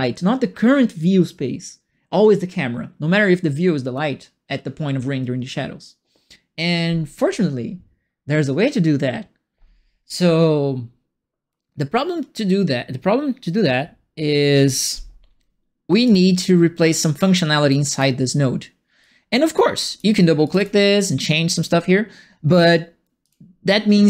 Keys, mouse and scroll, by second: 16.0 click, 17.7 right click, 19.0 click, 19.7 click, 20.4 click, 20.5 click.